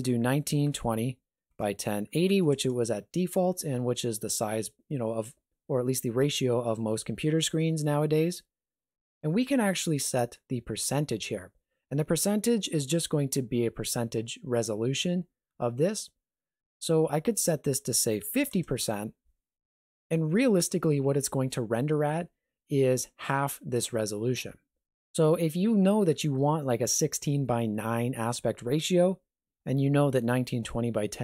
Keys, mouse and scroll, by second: 17.3 click.